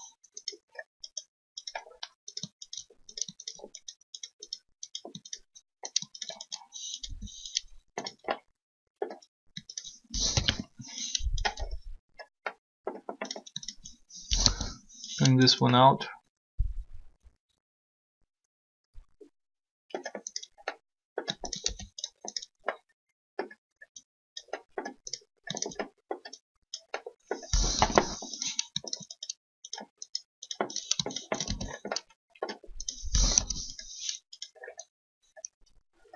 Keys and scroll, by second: 7.0 shift+r, 10.3 shift+1, 14.1 shift+1, 27.8 3, 33.3 3.